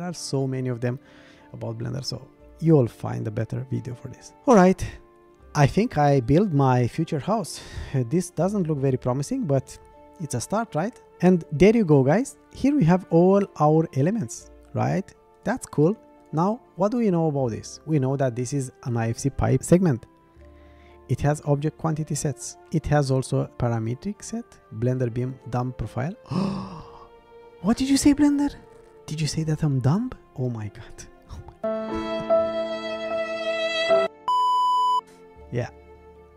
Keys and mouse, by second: 3.8 middle click, 6.0-7.8 middle drag, 8.0-9.8 middle drag, 15.4 click.